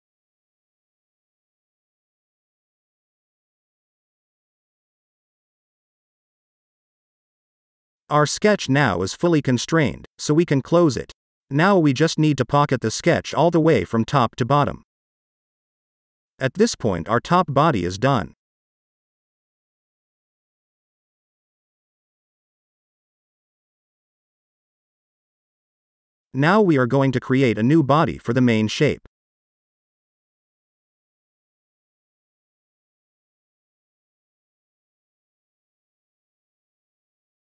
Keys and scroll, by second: 3.2 e, 7.0 e, 17.2 F2, 17.3-19.4 typing, 20.7 ctrl+s, 28.8 F2, 29.0-31.6 typing, 34.5 space.